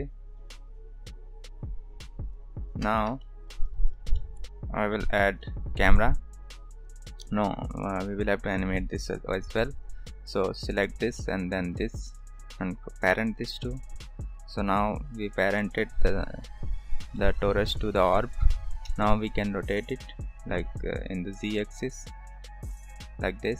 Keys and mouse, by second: 2.9 ctrl+s, 3.2 shift+middle drag, 3.7 click, 4.1 shift+middle drag, 5.2 shift+a, 10.6 click, 13.1 ctrl+p, 14.3 click, 15.7 g, 17.7 click, 18.8 n, 19.9 click, 21.3-23.5 drag.